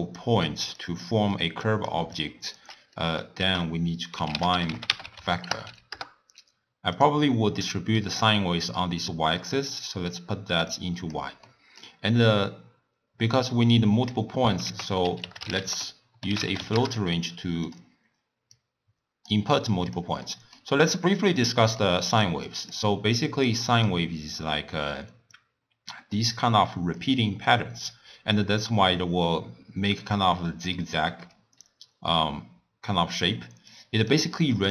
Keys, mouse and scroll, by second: 0.0-2.5 typing, 0.0 click, 0.8 click, 1.6 click, 2.2 click, 3.0 middle click, 3.4 ctrl+a, 5.6 Down, 7.6-9.6 middle drag, 9.6 click, 10.7-11.5 drag, 11.5-14.5 middle drag, 14.7 ctrl+a, 18.6-19.6 drag, 20.3-22.0 middle drag, 22.0-25.2 typing, 22.5 click, 23.3 click, 23.7 click, 24.3-24.8 drag, 25.3-27.0 drag, 27.0-27.4 d, 28.6-34.7 typing, 33.8 click.